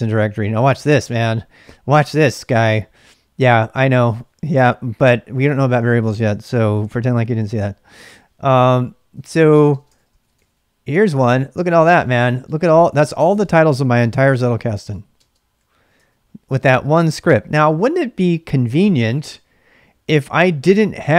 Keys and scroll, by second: 0.7 ctrl+[, 0.8 k, 1.0 k, 7.9 Return, 9.0-10.9 typing, 10.9 Return, 11.9-16.6 typing.